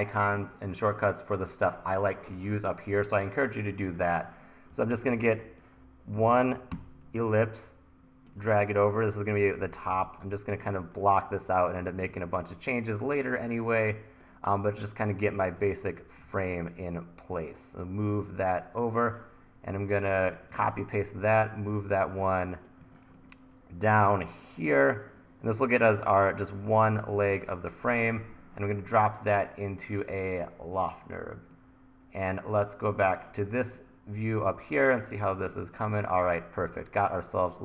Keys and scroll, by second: 4.7 e, 6.7 r, 8.4 e, 10.7 t, 12.1 e, 16.3 super+z, 20.6 super+c, 20.7 super+v, 23.8 1, 26.9 1, 34.7 1.